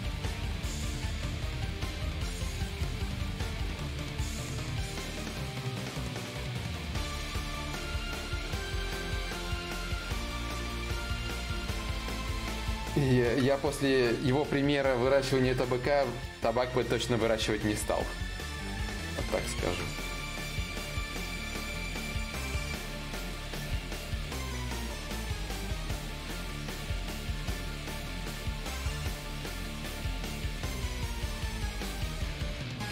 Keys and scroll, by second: 0.2 ctrl+z.